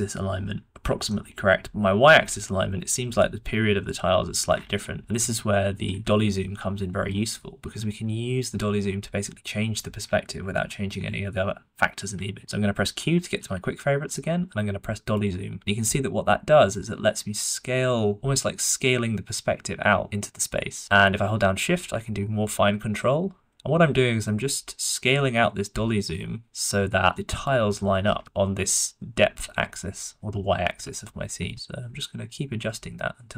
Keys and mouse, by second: 1.0-1.4 shift+middle drag, 6.3-6.6 shift+middle drag, 11.1 shift+middle drag, 13.3 q, 30.7 q.